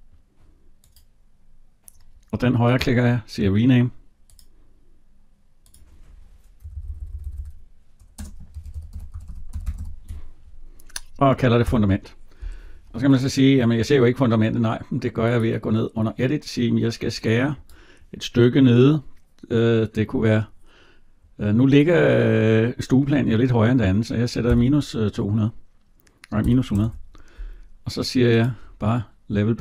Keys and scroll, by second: 6.5 BackSpace, 11.4 Return.